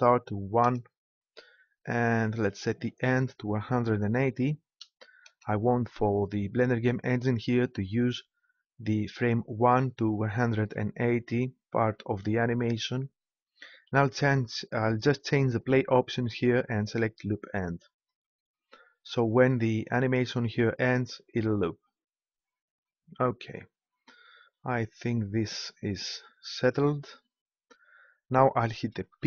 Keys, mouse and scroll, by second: 2.5-4.3 drag, 15.5-17.4 drag, 24.7-27.4 drag, 29.2 p.